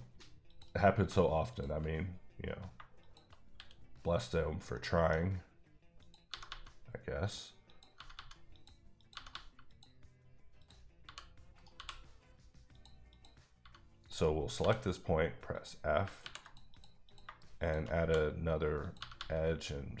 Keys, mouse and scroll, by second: 0.5 click, 1.0 shift+click, 1.5 click, 1.8 shift+click, 1.9 click, 2.7 shift+click, 3.3 shift+click, 3.4 click, 3.5 x, 4.0 click, 4.7 middle click, 6.0 click, 6.3 g, 6.4 g, 7.2 click, 7.7 click, 7.9 g, 8.1 g, 8.5 click, 9.0 click, 9.1 g, 9.3 g, 9.7 click, 10.6 click, 11.0 g, 11.5 right click, 11.8 f, 12.7 click, 13.1 click, 13.6 g, 14.1 right click, 14.6 f, 15.5 click, 16.2 ctrl+r, 16.4 ctrl+click, 17.1 click, 17.6 shift+click, 18.0 f, 18.8 click, 19.0 g, 19.2 g.